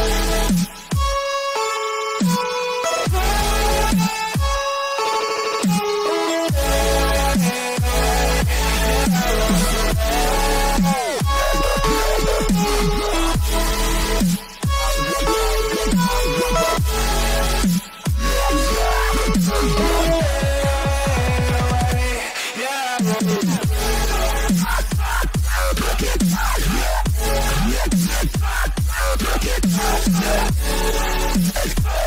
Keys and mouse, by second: 0.1 g, 2.3 a, 2.6 a, 3.5 c, 5.4 KP_3, 8.4 c, 13.9 a, 14.2 a, 14.4 s, 15.1-19.1 drag, 19.5 c, 22.7 KP_7, 23.8 z, 26.5 g, 31.4-32.0 middle drag.